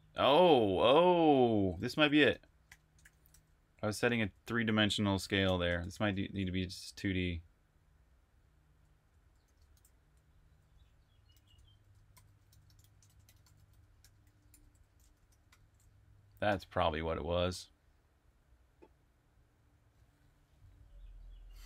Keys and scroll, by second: 0.0-2.8 typing, 4.9-17.5 typing.